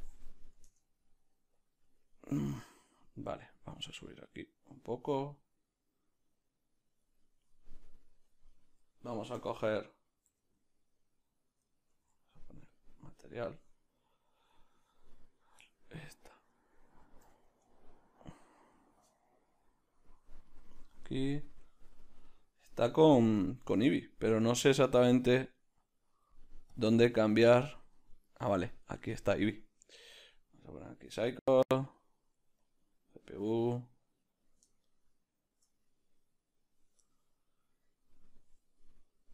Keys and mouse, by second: 0.8 Return, 8.0-9.5 right drag, 9.5 a, 13.9-17.5 right drag, 17.5-20.6 drag, 17.7 Return, 20.6 right click, 30.3-34.8 drag, 34.8-38.8 shift+middle drag, 38.8-39.3 right drag.